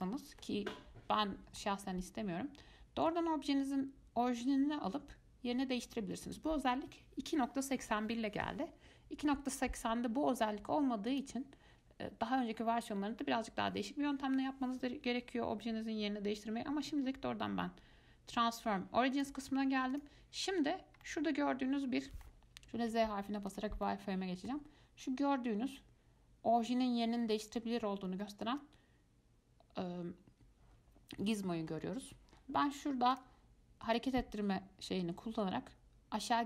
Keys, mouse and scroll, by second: 0.1 scroll down 1, 0.2-4.8 middle drag, 6.5 click, 19.3 click, 20.1 click, 21.2-23.0 middle drag, 23.0 z, 24.0-27.1 middle drag, 28.4-31.6 middle drag, 33.3 click, 34.2-36.4 drag.